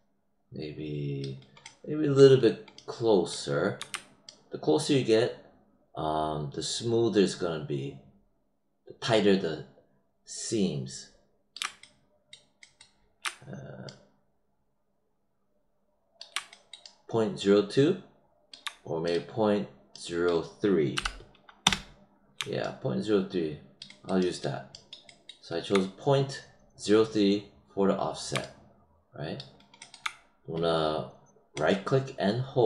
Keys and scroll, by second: 20.9 3, 21.6 Return.